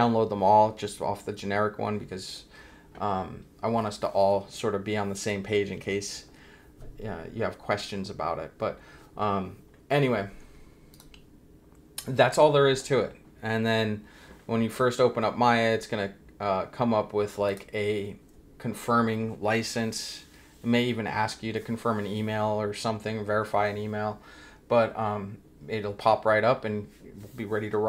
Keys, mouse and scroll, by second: 10.9 click, 11.2 Escape, 17.4 click.